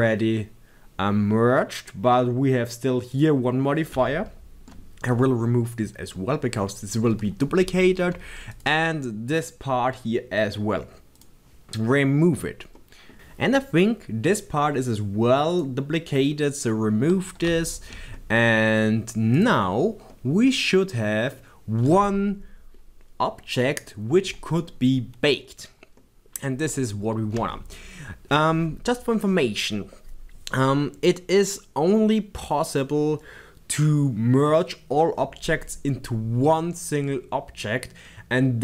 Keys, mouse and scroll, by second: 3.6 click, 8.5 click, 11.1 click, 12.7 middle click, 15.5 click, 17.6-19.3 shift+middle drag, 19.3 click, 19.6 scroll down 1, 20.1-38.6 middle drag, 27.1-27.5 scroll up 2.